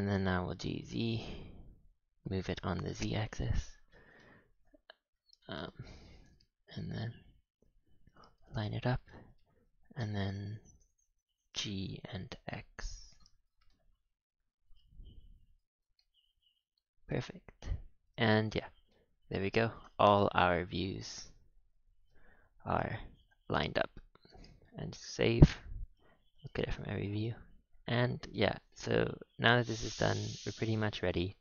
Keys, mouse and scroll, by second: 2.7 scroll up 6, 2.9 shift+middle click, 3.7-4.1 scroll up 3, 4.1 shift+middle drag, 4.4 scroll down 1, 4.5-4.9 scroll up 5, 4.9 g, 5.6 shift+middle click, 6.0 g, 8.4-9.0 scroll down 11, 9.0 shift+middle drag, 9.3 g, 13.4 scroll up 5, 13.6-14.3 shift+middle drag, 14.3 g, 15.9-17.5 shift+middle drag, 17.5-17.9 scroll down 5, 17.9 a, 18.1 a, 18.2 z, 18.6 scroll down 4, 18.8-19.6 middle drag, 19.6-20.4 scroll down 2, 20.4 KP_1, 21.6 z, 23.5-24.2 scroll up 6, 24.2 KP_3, 24.7 ctrl+s, 25.4 KP_7, 26.5-27.2 scroll down 5, 27.2-28.3 middle drag, 28.3 click, 28.7-29.1 middle drag, 29.1 a, 29.2 a, 29.8-31.4 middle drag.